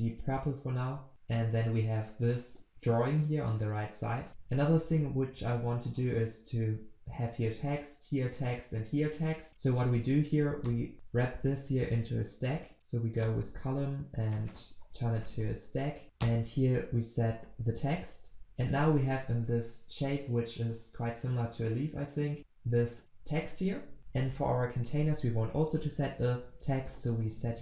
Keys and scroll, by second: 10.7 alt+Return, 16.5 ctrl+v, 24.0 ctrl+z, 27.2 ctrl+v.